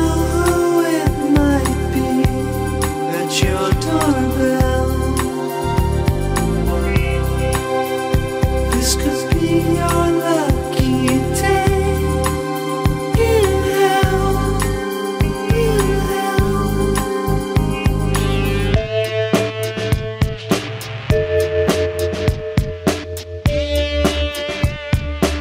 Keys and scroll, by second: 21.2 alt+scroll.